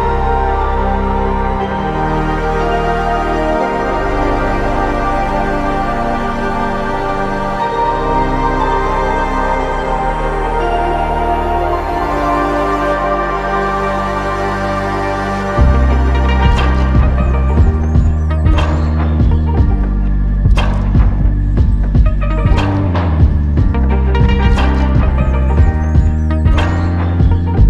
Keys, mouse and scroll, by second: 0.0 typing, 2.0 typing, 3.4-4.7 typing, 4.1 Tab, 5.8 typing, 6.1 ctrl+Tab, 6.7 ctrl+Tab, 15.4 alt+click, 23.2 ctrl+Tab.